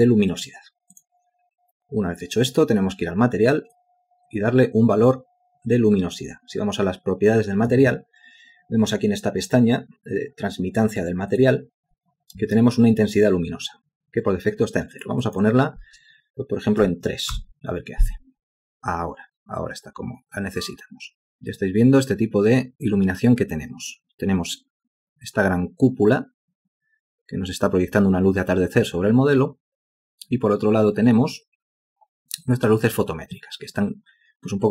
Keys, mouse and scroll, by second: 16.8 3, 17.4 Return.